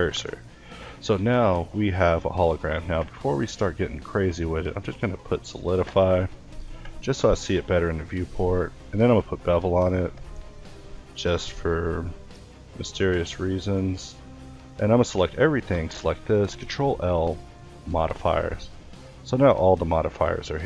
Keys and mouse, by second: 0.2-1.6 middle drag, 1.6 a, 2.1-3.9 middle drag, 5.4-9.9 middle drag, 13.7 a, 13.9 a, 17.8 middle click, 18.2 a, 20.0 alt+a, 20.4 Escape.